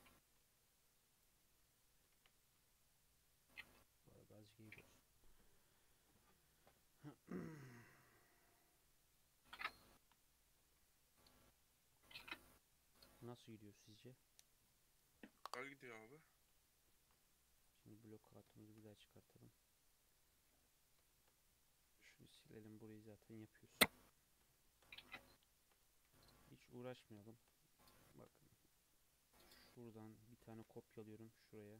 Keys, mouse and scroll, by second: 0.1 Tab, 0.4 z, 1.6 Tab, 2.0 Tab, 2.1 1, 2.5 alt+z, 3.0-3.5 middle drag, 3.5 Tab, 3.7 scroll down 1, 3.9 middle drag, 4.2 alt+z, 4.5 scroll down 1, 4.7-5.7 middle drag, 5.7 scroll down 2, 5.9-7.6 middle drag, 7.6-8.0 scroll up 2, 8.0-9.6 middle drag, 9.6 click, 10.0 KP_3, 10.8 alt+z, 11.3 alt+z, 11.5-11.9 scroll down 3, 11.9 shift+scroll up 1, 12.2-16.1 shift+middle drag, 17.0 alt+h, 17.6 click, 17.8-18.5 scroll down 2, 18.5-19.2 shift+middle drag, 19.2-19.5 scroll down 2, 19.9 click, 21.1-22.2 shift+middle drag, 22.2 click, 22.4 x, 23.2 middle click, 23.9 KP_3, 24.6 shift+middle click, 24.8-25.4 scroll up 6, 25.4-25.8 shift+middle drag, 25.8 click, 26.2 Tab, 26.4 2, 27.2 shift+middle click, 27.4-28.1 shift+scroll up 4, 28.5-29.4 scroll down 3, 29.4 click, 30.0-30.5 scroll up 2, 30.5 shift+d.